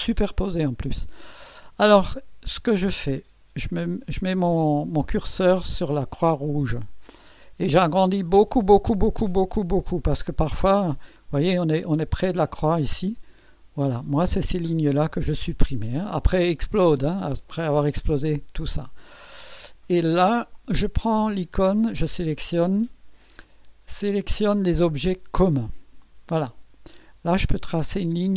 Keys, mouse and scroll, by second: 1.0-1.3 scroll up 1, 3.2 scroll up 1, 4.1-5.2 scroll up 2, 5.4-6.7 scroll up 3, 6.9-11.4 scroll up 22, 12.6-14.5 scroll up 10, 26.0 click, 27.8 click.